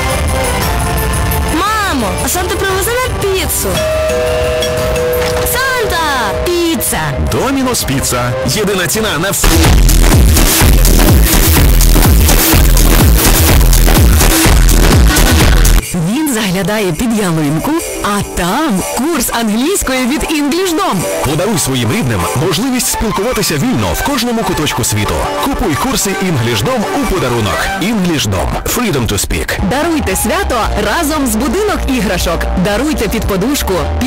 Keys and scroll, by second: 15.8 Page_Down.